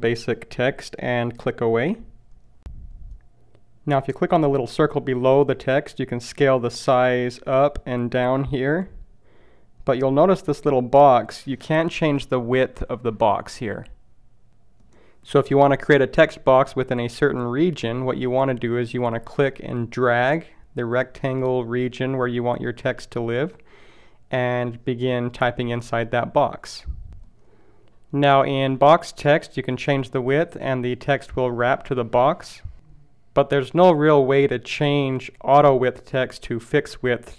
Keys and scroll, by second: 0.1 shift+h.